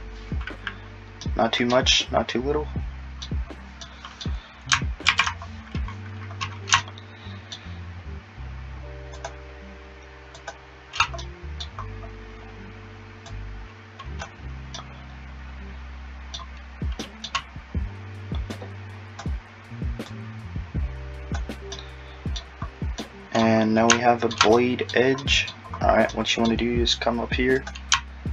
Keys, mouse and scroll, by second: 5.1 ctrl+z, 5.3-6.3 scroll up 2, 6.3-6.8 scroll up 2, 6.8 shift+middle click, 9.2 shift+click, 10.3 shift+click, 11.2 middle click, 11.7-13.3 scroll down 5, 13.3 click, 14.8 middle click, 18.5 click, 21.7 middle click, 23.0 middle click, 24.5 middle click, 25.8-26.1 scroll, 26.1 middle click, 27.6 click.